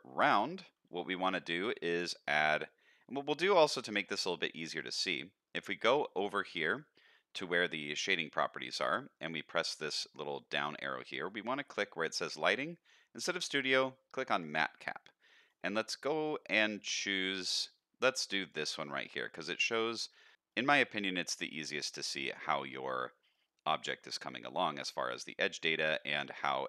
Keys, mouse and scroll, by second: 0.8 z, 2.0 click, 4.0 middle click, 5.0 click, 6.3-7.0 scroll down 1, 9.1-18.8 drag, 18.9-20.1 middle drag, 20.1-20.5 scroll down 1, 20.5 middle click, 21.3-21.8 middle drag, 22.5 middle click, 23.0-23.3 scroll up 1, 23.3 middle click, 24.2 middle click, 26.0 middle click.